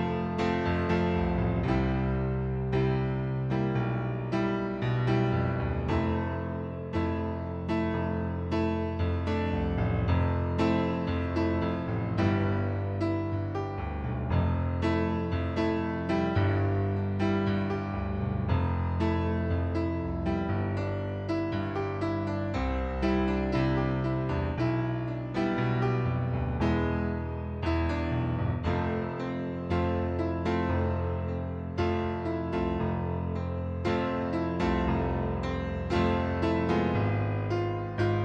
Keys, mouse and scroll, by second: 1.0 shift+click, 1.5 shift+click, 2.0 shift+click, 2.7 shift+click, 4.4 ctrl+d, 5.5 click, 7.9 click, 8.9 click, 9.6 shift+click, 10.2 shift+click, 11.8 shift+click, 12.5 shift+click, 13.1 shift+click, 13.6 shift+click, 14.1 right click, 14.7 middle click, 15.8 ctrl+d, 17.0 click, 19.1 click, 20.3 click, 23.0 right click, 24.8 middle click, 25.7 click, 26.6 right click, 27.1 middle click, 27.8 shift+click, 28.6 click, 28.9 right click, 29.7 click, 31.2 click, 31.9 click, 34.8 middle click, 35.4 right click, 36.4 click, 37.6 click.